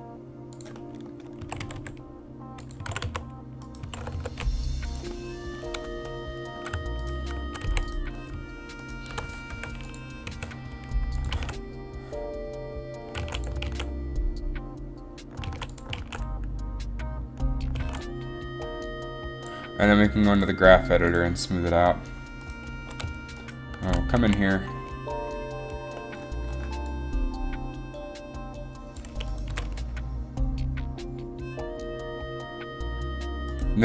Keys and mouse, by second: 1.5-4.0 typing, 5.0-6.4 drag, 6.4-7.5 right drag, 7.5 r, 7.8 a, 9.6 i, 10.4 a, 11.5 alt+a, 13.4 alt+a, 13.9 alt+a, 14.5 alt+a, 15.3 alt+a, 15.7 alt+a, 16.1 alt+a, 16.8 alt+a, 18.0 alt+a, 21.9 alt+a, 24.9 a, 27.0 a, 29.6 g, 29.7 g.